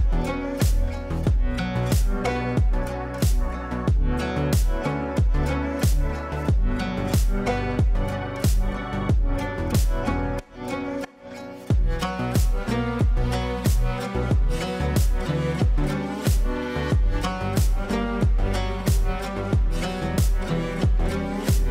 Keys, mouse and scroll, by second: 0.2-2.8 drag, 2.8-5.8 shift+drag, 5.8-7.1 ctrl+drag, 7.1 F3, 7.5 click, 8.1 F2, 8.3-11.9 drag, 11.9 space, 12.8 click, 14.4 right click, 17.3-21.7 drag.